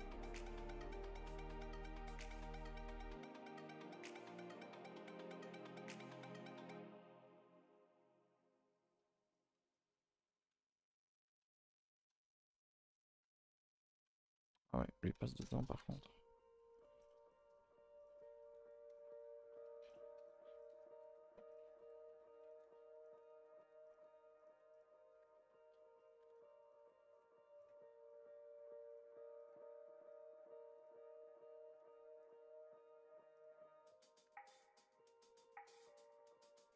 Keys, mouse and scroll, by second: 2.4 click, 4.1 click, 8.6 click, 10.7 click, 11.1 click, 11.9 click, 12.2 shift+click, 12.5 shift+click, 12.9 click, 14.4 click, 15.4 click, 17.0 click, 17.3 click, 18.6 click, 18.9 click, 19.1 click, 19.9 shift+click, 20.3 shift+click, 20.6 shift+click, 23.8 click, 24.7 click, 27.5 click, 28.1 click, 29.4 click, 30.7 click, 32.2 click, 34.0 click, 35.9 click, 36.4 click.